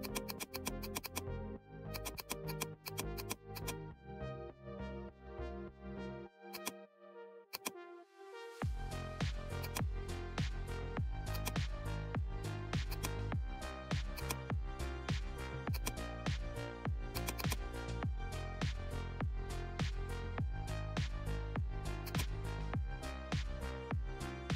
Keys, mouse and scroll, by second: 5.1 scroll up 1, 6.5 click, 9.5 click, 11.3 click, 12.8 click, 15.7-21.1 drag, 22.0-23.3 drag, 23.3-23.7 scroll up 1.